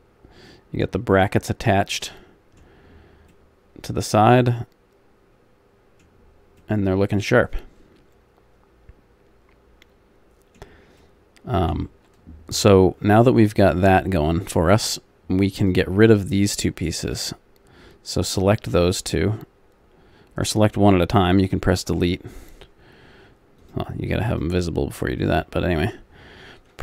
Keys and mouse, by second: 4.9 middle click, 6.1 middle click, 6.2-8.2 middle drag, 21.4 Delete, 26.7 Delete.